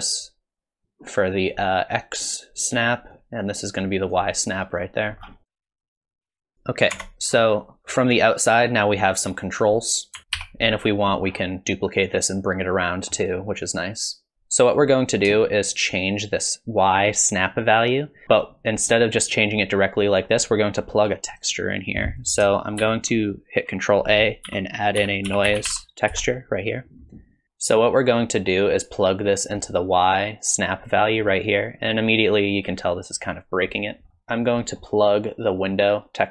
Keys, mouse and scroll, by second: 10.2 ctrl+space, 10.2 scroll down 3, 10.4 n, 11.3-11.8 scroll down 3, 12.9 middle click, 15.5 shift+click, 19.0 shift+click, 22.1 click, 22.8 shift+a, 27.4 alt+click, 34.1 middle click, 34.6 middle click, 35.5 click.